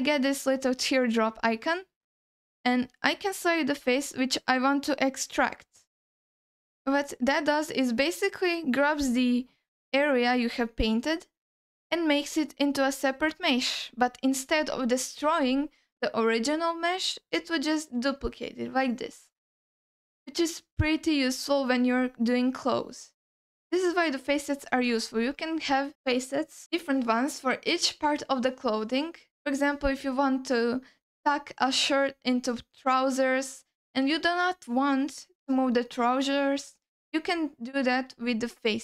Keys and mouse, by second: 12.8 ctrl+alt+middle drag, 13.4 alt+middle click, 17.6 g, 19.5-22.3 alt+middle drag, 23.5 x, 25.0 ctrl+alt+middle drag, 38.1 middle click.